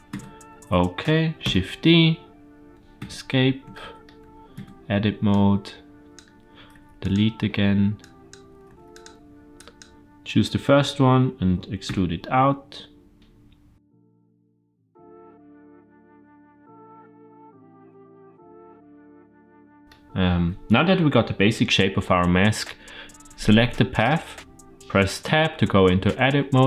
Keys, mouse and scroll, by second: 1.3 shift+d, 3.6-3.9 shift+middle drag, 4.4 Tab, 5.2 click, 6.6 x, 7.8-8.2 drag, 8.5 x, 9.4 click, 11.7 e, 13.9-19.8 typing, 14.5 click, 14.7 click, 14.8 middle click, 15.0 shift+middle click, 15.3 scroll down 1, 15.3 middle click, 15.5 click, 15.7 click, 15.8 middle click, 16.3 Tab, 16.5 Tab, 16.6 click, 16.7 click, 16.8 click, 17.3 middle click, 17.4 click, 17.5 middle click, 17.9 click, 18.0 middle click, 18.2 middle click, 18.3 middle click, 18.4 Tab, 18.7 click, 18.8 click, 18.8 shift+right click, 18.8 click, 19.0 Tab, 19.3 click, 19.3 middle click, 23.1 Tab, 23.1 ctrl+z, 25.1 Tab.